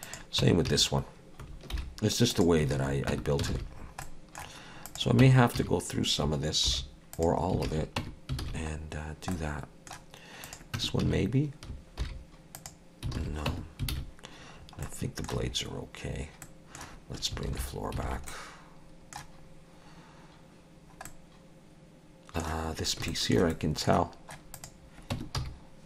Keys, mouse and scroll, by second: 0.0 click, 0.4 Tab, 0.7 a, 1.7 alt+n, 2.8 alt+a, 3.1 Tab, 3.5 alt+a, 3.8-4.1 scroll down 3, 4.0 middle click, 4.9 click, 5.2 Tab, 5.6 a, 6.7 alt+n, 7.7 alt+a, 8.0 Tab, 8.4 alt+a, 9.1 scroll down 1, 9.3 middle click, 10.5 click, 10.8 Tab, 11.0 a, 12.0 alt+n, 13.2 alt+a, 13.5 Tab, 13.9 alt+a, 14.6-15.5 scroll down 3, 14.9 middle click, 15.5 scroll up 1, 16.4 middle click, 16.4-16.9 scroll up 1, 17.5 alt+h, 18.1 alt+a, 18.3 middle click, 19.5-20.5 scroll up 2, 20.8 scroll down 1, 21.1 middle click, 22.7-23.1 scroll up 2, 23.1 shift+middle click, 23.5 middle click, 24.6 click, 25.2 Tab, 25.4 a.